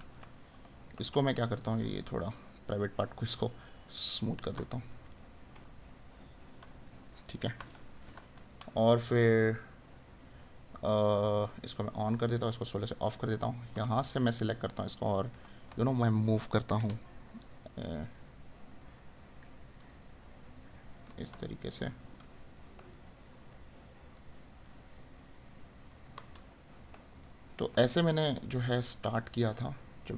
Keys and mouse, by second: 0.1 right click, 4.7 right click, 6.6 right click, 14.6 right click, 18.2 right click, 25.3 right click, 29.1 right click.